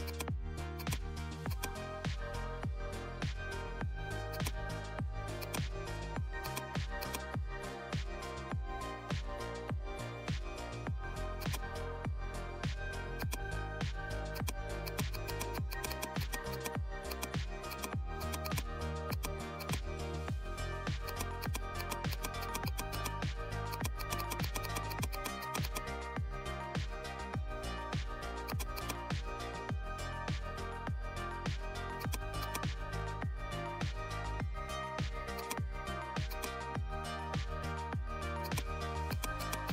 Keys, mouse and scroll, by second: 0.0-3.9 drag, 3.9-4.3 scroll up 1, 4.3-11.4 drag, 11.4-13.1 drag, 20.7 x, 20.9 click, 23.4 x, 23.6 click, 28.4 click, 28.5-31.3 drag, 31.9 click, 32.0-35.0 drag, 35.3 click, 37.7 right click, 38.4-39.7 drag.